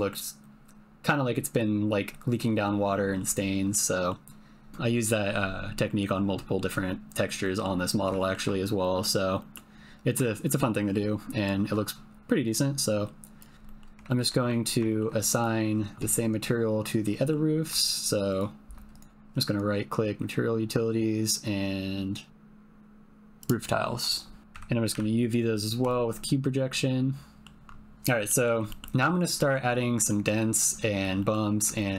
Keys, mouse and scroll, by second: 2.9 middle click, 3.5 shift+click, 3.7 click, 5.9 click, 7.4 middle click, 8.3 shift+middle click, 8.9 middle click, 9.4 middle click, 10.4 shift+middle click, 12.5 click, 13.6 middle click, 14.0 ctrl+middle click, 14.5 Tab, 14.8 shift+middle click, 15.4 click, 17.2 click, 18.0 shift+click, 18.3 shift+click, 18.9-23.5 drag, 24.4 Tab, 24.5 a, 24.9 u, 26.8 click, 28.2 click, 28.7 ctrl+middle click, 29.4 middle click, 30.0 middle click, 31.2 middle click, 31.8 ctrl+middle click.